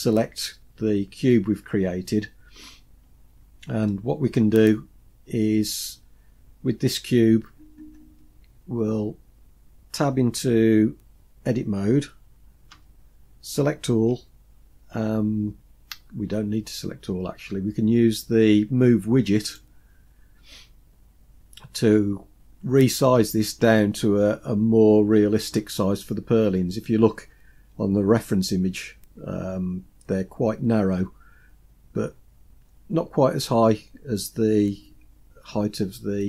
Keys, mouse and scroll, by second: 3.3-4.0 scroll down 2, 4.0-6.0 middle drag, 12.8 Tab, 14.2 a, 19.5 click.